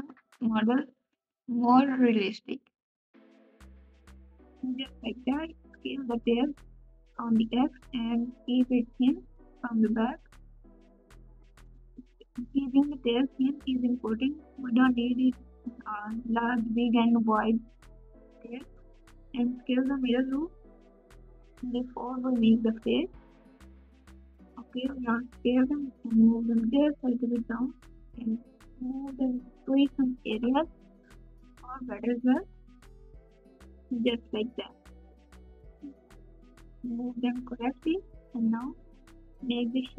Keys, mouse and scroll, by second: 0.6 g, 6.0 e, 19.5 alt+z, 26.3 ctrl+b, 34.5 KP_1, 34.5 KP_6, 34.5 alt+z.